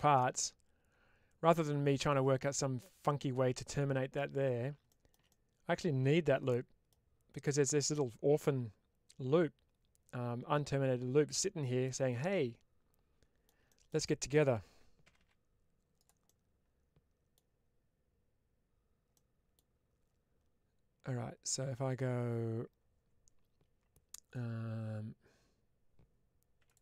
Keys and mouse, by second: 5.2 middle click, 6.3 middle click, 11.7-13.3 middle drag, 13.9 middle click, 15.9 click, 16.1-17.2 middle drag, 19.0 middle click, 26.5 click, 26.5 3.